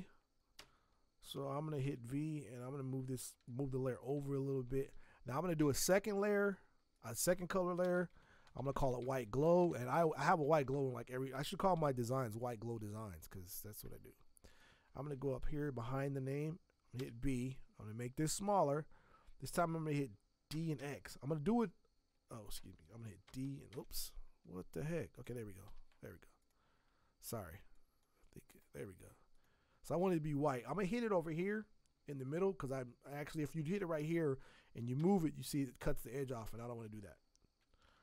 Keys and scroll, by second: 0.6 v, 1.3 Escape, 1.8 v, 7.8 ctrl+shift+n, 8.3-11.7 typing, 13.8 space, 17.0 b, 20.5 d, 20.8 x, 22.5 Escape, 23.2 d, 23.7 x, 25.7 Escape, 30.1 ctrl+z, 35.0 v, 36.4 ctrl+z, 37.8 ctrl+z.